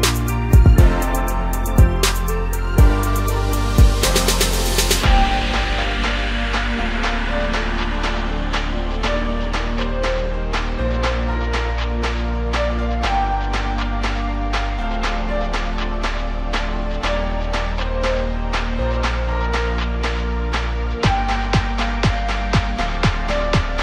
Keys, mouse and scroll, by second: 1.1 p, 2.2 Tab, 2.8 click, 3.3 scroll down 2, 3.5 middle click, 4.2 Tab, 5.6 KP_Divide, 6.7 a, 8.1 1, 8.9 f, 9.7 3, 10.3-10.6 scroll down 2, 10.9 KP_Divide, 12.4 KP_Decimal, 13.1 middle click, 13.9-14.7 scroll up 2, 14.7 g, 16.8-17.6 scroll down 2, 17.6 e, 19.0 e, 21.5 e, 23.6 scroll down 1.